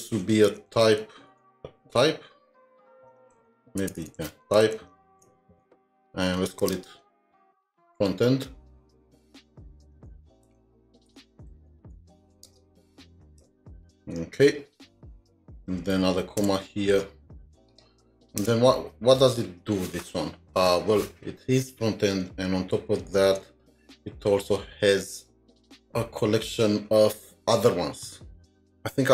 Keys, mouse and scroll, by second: 0.1-1.4 typing, 0.3 click, 3.1-4.7 typing, 5.1 Insert, 6.4-7.0 typing, 9.5-13.7 typing, 18.0 typing, 18.4 Return, 22.3 alt+Tab, 23.0 alt+Tab, 23.5 alt+Tab.